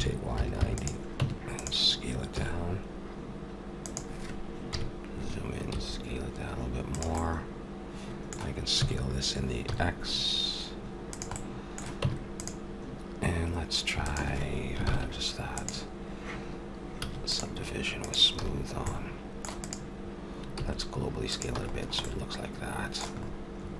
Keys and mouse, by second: 1.2 Tab, 2.3 s, 4.7 KP_Decimal, 5.7 s, 8.8 s, 12.0 Tab, 14.8 ctrl+l, 15.4 click, 17.0 a, 17.2 click, 18.4 a, 20.5 s, 21.1 click, 21.6 a, 21.8 middle click.